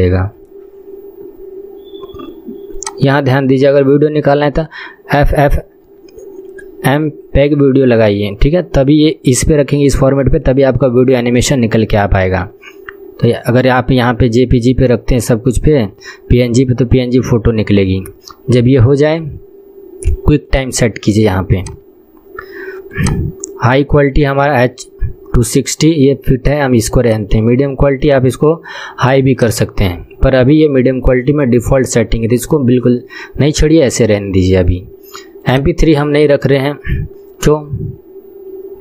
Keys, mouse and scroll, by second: 0.8 scroll down 3, 2.9-18.8 drag, 18.8 scroll down 1, 20.6-22.2 drag, 22.2-23.0 scroll down 3, 23.0-30.1 drag, 30.1 scroll down 1, 35.6-38.8 drag.